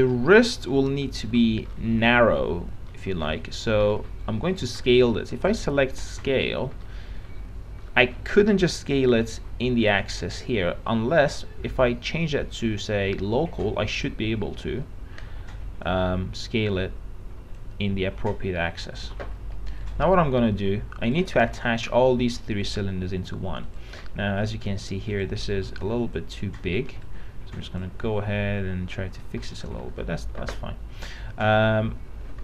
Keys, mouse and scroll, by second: 0.1 p, 0.3 middle click, 1.0-2.2 alt+middle drag, 2.2-3.1 scroll up 1, 3.1 middle click, 4.2 alt+middle click, 5.6 click, 7.1 middle click, 8.0 scroll up 1, 8.1 middle click, 16.1-18.1 drag, 19.3 o, 20.1 right click, 21.3 click, 21.6 middle click, 22.5-22.9 scroll down 1, 22.9 click, 24.2 middle click, 24.9-25.7 scroll up 1, 25.7 click, 26.8 w.